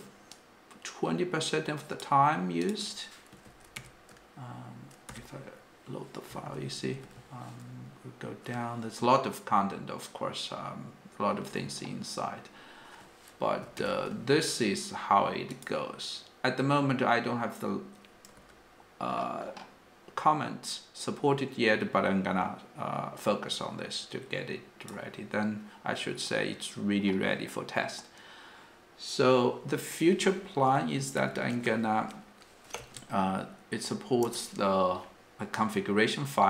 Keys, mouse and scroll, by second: 6.4-7.3 typing, 7.3-11.5 ctrl+d, 32.8 space, 32.8 f, 34.2 Return.